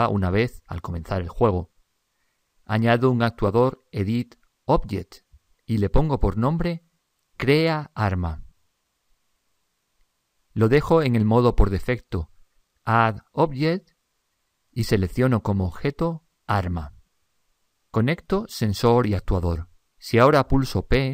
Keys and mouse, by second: 3.9 click, 6.9 click, 14.2 click, 18.6 click.